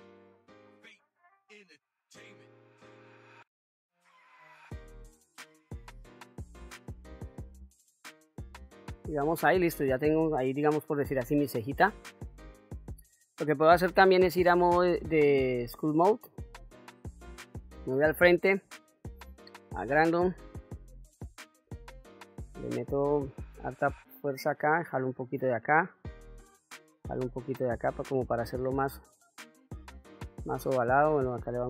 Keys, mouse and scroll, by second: 0.7 click, 1.2 click, 1.8 r, 3.0 click, 3.3 s, 4.1 click, 4.9 r, 5.5 click, 5.7 s, 6.3 click, 7.5 Tab, 8.8 q, 9.3-9.6 scroll down 1, 9.6-12.5 middle drag, 12.8 middle click, 14.4 ctrl+Tab, 17.1 KP_1, 18.6 f, 21.7-22.5 shift+f, 23.9-31.6 drag.